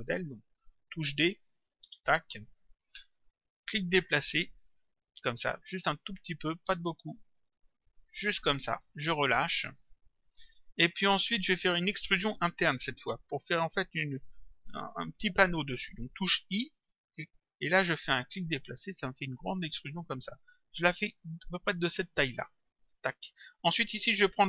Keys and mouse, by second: 1.9 d, 3.7 click, 18.4 click.